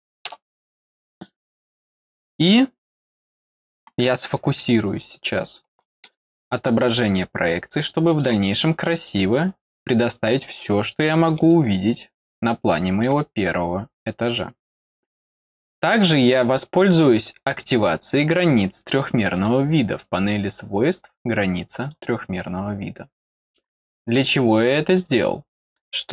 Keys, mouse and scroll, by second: 5.1 middle click, 6.1-8.2 middle drag, 8.6 middle click, 9.5 scroll up 1, 10.5 middle click, 11.4-13.0 middle drag, 17.4 scroll down 2, 18.0 scroll down 2, 18.5 scroll up 2, 19.3 click, 19.8-21.0 scroll up 2, 23.9 middle click, 25.6 click.